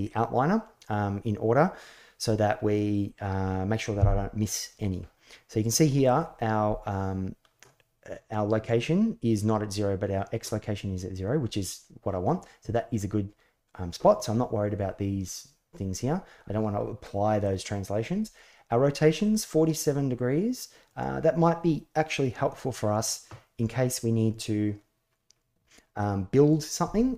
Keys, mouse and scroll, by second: 5.8 middle click, 19.0-20.7 drag.